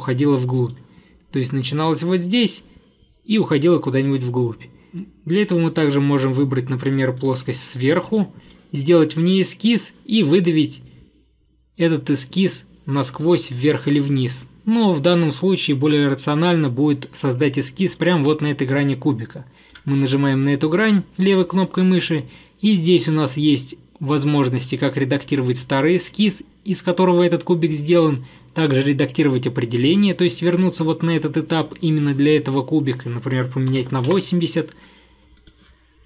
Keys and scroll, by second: 33.5-34.3 typing.